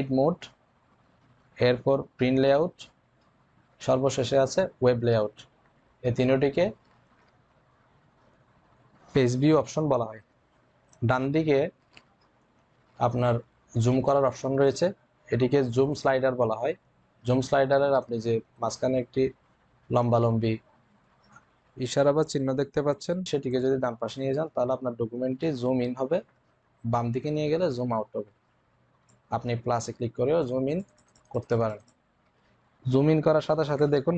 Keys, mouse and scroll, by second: 23.4-34.1 drag.